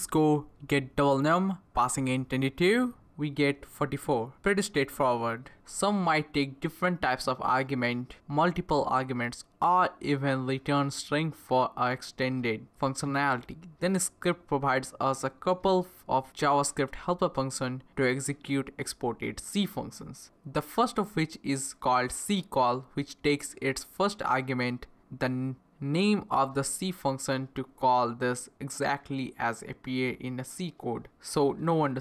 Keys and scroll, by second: 0.0-0.3 typing, 0.3 ctrl+c, 0.6 Up, 0.6 Return, 2.1-4.5 typing, 11.5-13.0 typing, 14.2 Right, 14.7-20.6 typing, 21.6 shift+n, 22.7-23.7 typing, 25.5-27.5 typing, 28.3 Return, 29.0 typing.